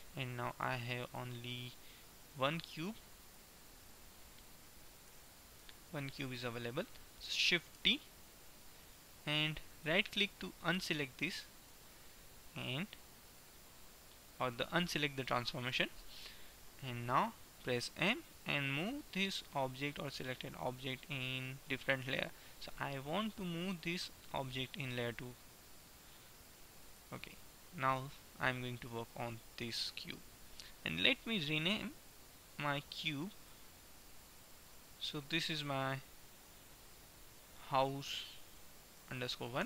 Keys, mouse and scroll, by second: 1.3-3.1 right drag, 1.6 Tab, 2.5 Tab, 3.3 right click, 5.1 g, 8.0 shift+d, 12.0-13.6 middle drag, 17.3 middle click, 18.0 m, 27.0-29.5 middle drag, 33.0-36.5 drag.